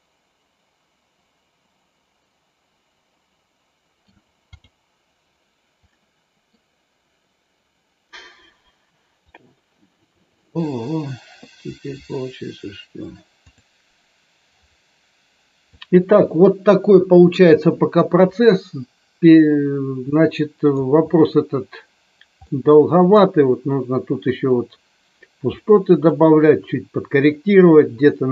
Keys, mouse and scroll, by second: 4.4 click, 5.9 middle click, 13.5 click, 18.3-20.8 middle drag, 22.5 middle click, 25.6 middle click.